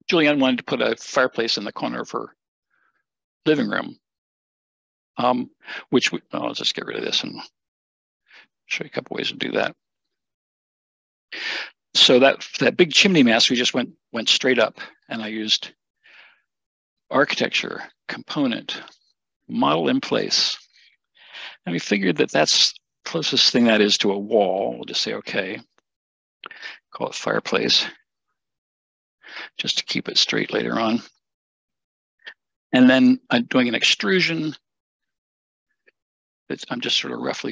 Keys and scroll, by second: 7.8 BackSpace, 28.6-29.4 typing, 30.2 Return.